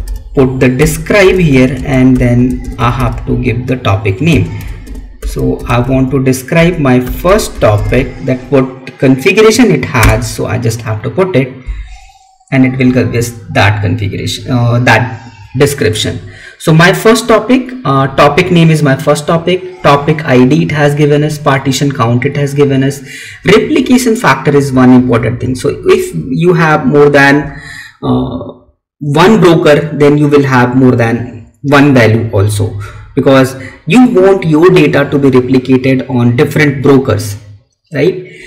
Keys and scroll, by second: 1.6 space.